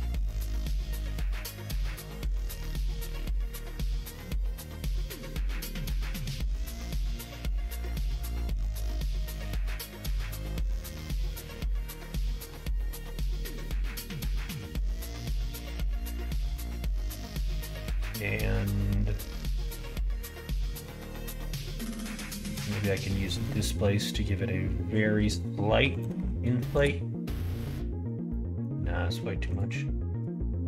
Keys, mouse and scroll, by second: 0.1 middle click, 1.2-4.1 middle drag, 5.1 click, 5.8 middle click, 7.0 click, 8.0 click, 8.5 click, 9.9 click, 10.3 middle click, 11.0 middle click, 11.8 click, 12.6-14.4 drag, 15.0 middle click, 15.8 middle click, 16.3 shift+middle click, 17.3-23.5 drag, 24.8-27.3 drag, 28.2 middle click, 29.4-30.6 drag.